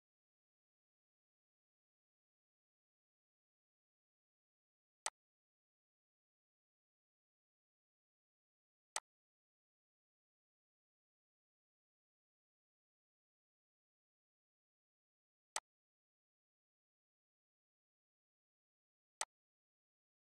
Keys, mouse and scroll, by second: 3.0-4.8 drag, 5.1-7.0 drag, 10.5 shift+d.